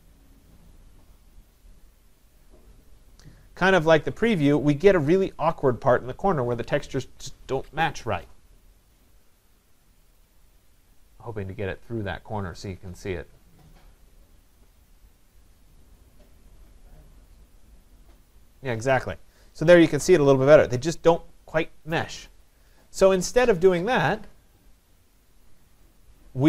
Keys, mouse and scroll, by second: 25.2 click.